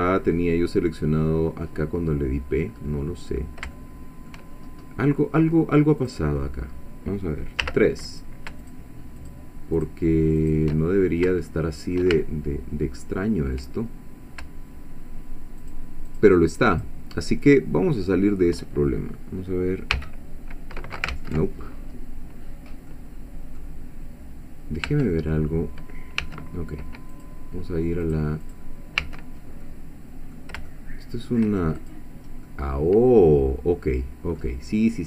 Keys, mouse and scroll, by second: 2.7-3.2 scroll up 1, 3.8 shift+middle click, 4.7-5.0 shift+scroll up 3, 5.2 scroll down 2, 6.0 click, 7.6 3, 8.1 click, 8.6 shift+click, 9.2 shift+click, 9.8 shift+click, 10.4 shift+click, 10.8-12.1 shift+middle drag, 12.2-13.7 ctrl+shift+middle drag, 15.6 shift+click, 16.1 shift+click, 16.7 shift+click, 17.6 shift+middle click, 19.9 f, 21.1 ctrl+z, 22.3 scroll down 2, 22.9 click, 24.9 Tab, 26.2 1, 27.1 click, 28.0 click, 28.4 click, 29.0 1, 29.6 middle click, 30.7 shift+middle click, 31.8 shift+click, 32.5-34.6 middle drag, 34.6 scroll down 1.